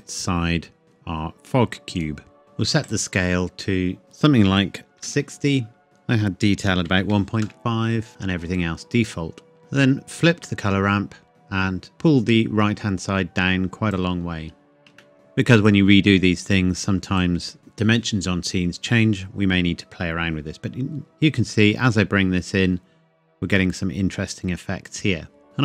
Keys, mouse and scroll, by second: 0.8 middle click, 2.0 click, 2.8 click, 5.0 KP_6, 5.1 KP_0, 5.8 click, 6.6 KP_1, 6.9 KP_Decimal, 7.1 KP_5, 7.4 KP_Enter, 8.1 shift+middle click, 9.6 click, 15.0 shift+middle click, 15.1 click, 20.9-21.6 scroll up 1, 23.0 scroll up 1, 23.6 middle click.